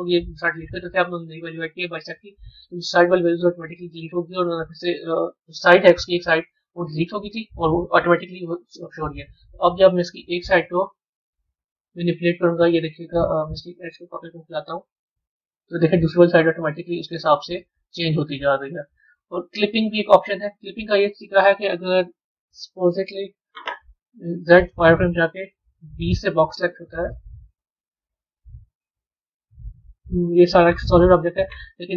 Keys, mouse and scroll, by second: 3.5 click, 5.4 middle click, 5.9 Tab, 8.6-9.6 middle drag, 9.6 b, 13.2 click, 14.1 click, 20.7-21.2 scroll down 3, 21.3-22.8 middle drag, 22.8 KP_1, 31.7-31.9 middle drag.